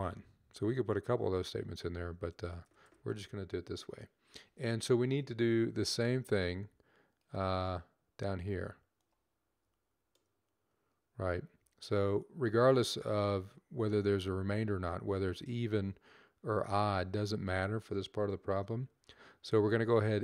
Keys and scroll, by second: 11.0 ctrl+c, 18.8 ctrl+v.